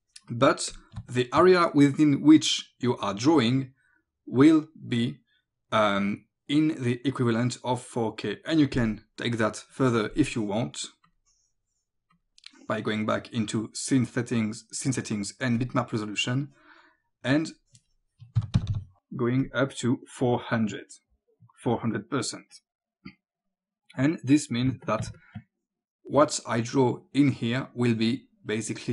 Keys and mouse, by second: 0.7 click, 1.0 space, 1.1 click, 10.1 click, 12.2 click, 15.6 click, 18.4 KP_4, 18.6 KP_0, 19.5 click, 20.5 click, 22.5 click, 24.7 space, 24.9 click, 25.2 click, 28.8 click.